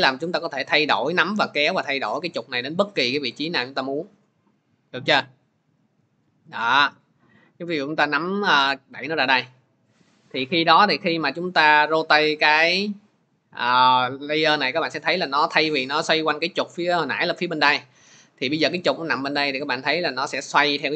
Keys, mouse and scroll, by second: 8.8-20.5 drag.